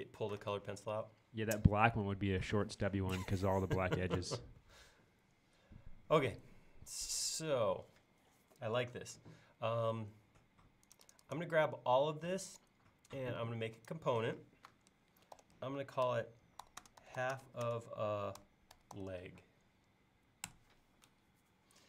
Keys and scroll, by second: 15.2-16.1 typing, 17.5-18.4 typing, 20.5 Return.